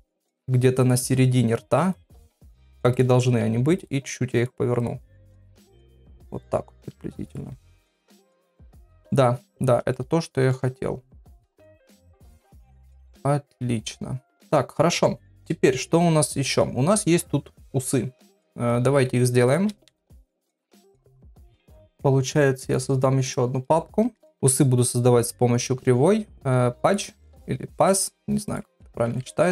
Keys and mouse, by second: 0.2 click, 0.4 g, 1.1 r, 2.1 g, 2.9 click, 3.3 r, 3.9 g, 4.8 click, 5.0 r, 5.8 g, 7.2 click, 7.5-8.6 middle drag, 9.0 middle click, 9.9 middle click, 12.4-14.5 middle drag, 19.9 ctrl+Tab, 21.8 click, 22.6 click, 23.2 click, 24.3 shift+x, 24.5 shift+a, 27.7 s, 29.0 KP_7.